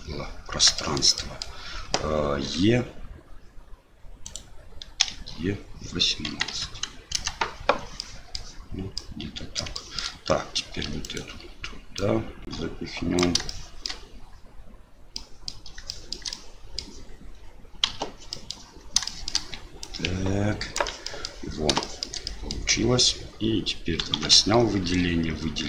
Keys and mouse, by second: 0.9 shift+click, 1.3 click, 2.5 r, 5.0 e, 8.1 click, 9.0 click, 9.9 shift+click, 10.9 3, 11.0 click, 12.0-13.2 drag, 13.2 typing, 13.6 shift+click, 15.2 click, 16.0 shift+click, 16.4 click, 17.8 KP_Divide, 18.3 middle click, 19.0 shift+middle click, 19.8 click, 21.1 middle click, 21.9 shift+middle click, 22.0 shift+click, 22.4 middle click, 24.2 alt+a, 24.8 l.